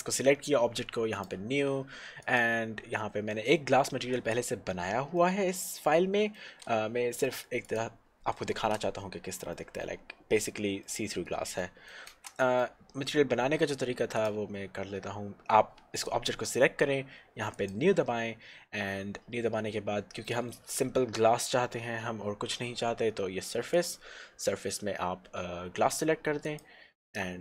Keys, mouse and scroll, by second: 2.2 click, 5.2 middle click, 7.8 click, 8.6 shift+z, 9.7 middle click, 12.1 shift+z, 12.6 middle click, 14.2 click, 17.7 click, 20.4 middle click, 23.8 click.